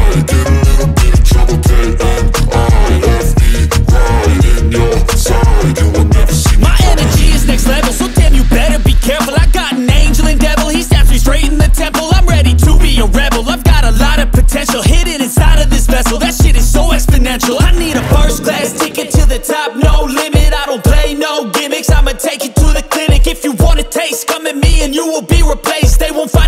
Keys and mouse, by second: 3.3 click, 4.7 click, 5.1 click, 5.8 ctrl+z, 6.1 click, 15.5 click, 16.5 click, 17.4 click, 18.1 click, 19.1 ctrl+z, 20.1 ctrl+z, 20.8 click, 22.2 ctrl+z, 23.1 click, 23.4 click, 24.4 ctrl+z, 25.6 ctrl+z.